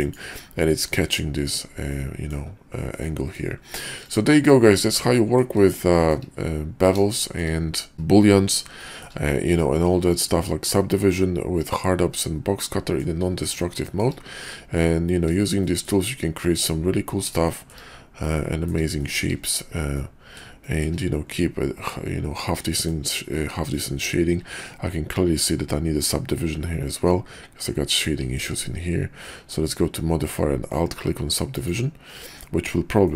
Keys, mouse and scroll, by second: 1.9-2.3 middle drag, 3.0-3.4 middle drag, 4.0 click, 5.0-5.4 middle drag, 5.8-6.1 shift+middle drag, 7.1 shift+middle drag, 8.8 shift+middle drag, 9.5-13.0 middle drag, 13.6 shift+middle click, 14.7-15.3 middle drag, 15.6 shift+middle drag, 17.5 shift+middle click, 18.2-18.7 middle drag, 18.9 shift+middle drag, 20.0-20.4 middle drag, 20.6 shift+middle drag, 21.4-22.8 middle drag, 24.3 q, 28.4 q, 33.0-33.1 middle drag.